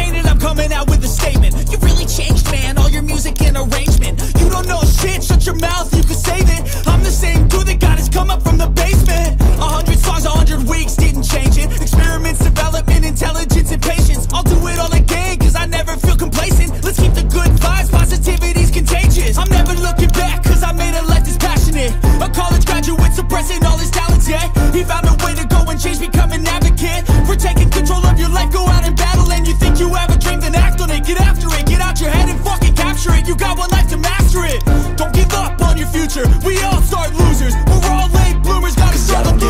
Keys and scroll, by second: 0.2 x, 5.1 x, 6.3 x, 11.7 x, 13.1 ctrl+z, 27.1 ctrl+alt+e, 30.2 Return.